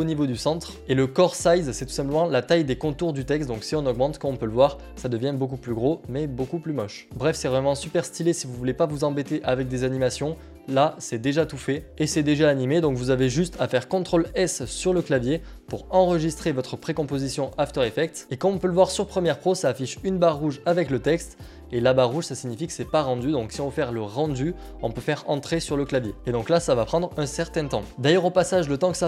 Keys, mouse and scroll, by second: 0.3-4.2 drag, 5.1-7.2 drag, 8.1-10.0 middle drag, 11.2 middle click, 11.8 click, 18.2 click, 25.7 Return, 26.1 click.